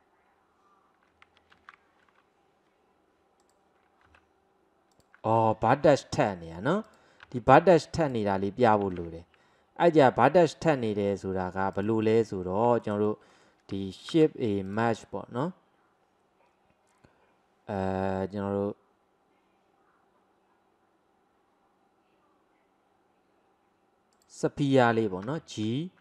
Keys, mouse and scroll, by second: 1.6 ctrl+z, 3.5 click, 4.3 g, 5.9 ctrl+z, 6.9 click, 7.3 g, 9.0 ctrl+z, 10.0 middle click, 10.5-11.8 scroll down 1, 11.8 click, 12.5 scroll down 1, 12.8-14.2 shift+middle drag, 14.2 shift+a, 25.3 g.